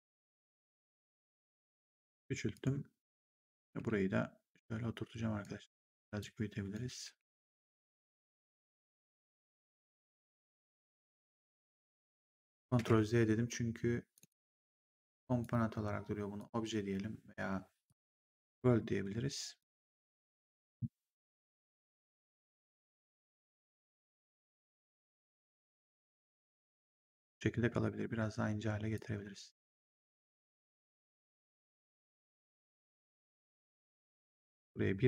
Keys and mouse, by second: 0.3 click, 2.4 click, 3.6 w, 4.5 click, 5.5 r, 6.1 click, 6.9 w, 9.1 click, 12.6 ctrl+z, 14.1 click, 15.3 click, 17.7 click, 19.5 click, 21.4 click, 25.8 click, 27.6 r, 28.8 click, 29.7 w, 30.1 click, 33.0 click, 34.3 1.